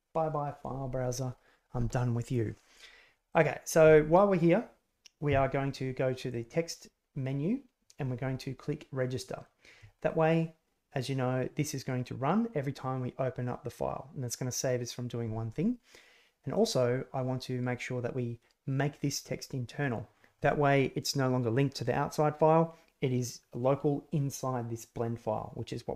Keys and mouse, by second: 3.2 click, 6.4-9.5 drag, 16.6-19.9 drag.